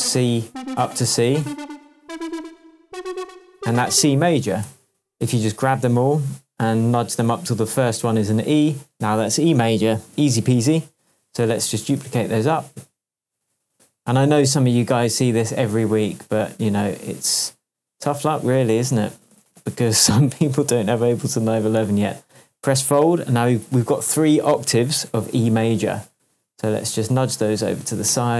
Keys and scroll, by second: 4.6 p, 6.9 Up, 28.1 Left.